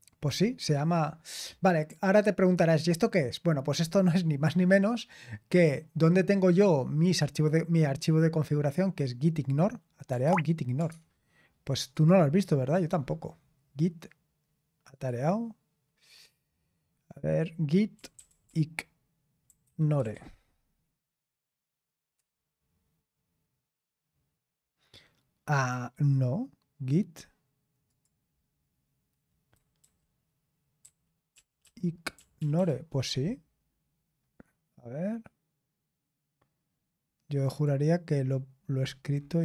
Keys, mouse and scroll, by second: 10.2 alt+Tab, 10.8 alt+Tab, 11.9 click, 14.9 click, 17.2 click, 17.6 click, 17.7-20.6 typing, 22.1 Return, 27.8-29.5 drag, 29.5 Left, 29.8 Left, 30.8 Left, 31.3 Right, 31.6 Right, 32.1 Right, 32.3 Right, 37.4 click.